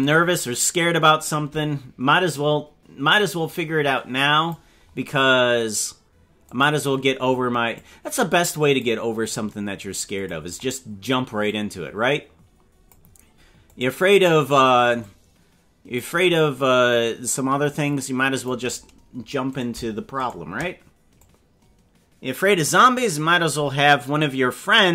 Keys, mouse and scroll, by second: 2.3-4.5 drag, 6.5 click, 7.7-8.9 drag, 10.1 click, 11.4-12.9 drag, 13.7 click, 15.0-16.0 drag, 17.8 click, 19.6 right click, 20.2 shift+right click, 21.1-22.2 drag.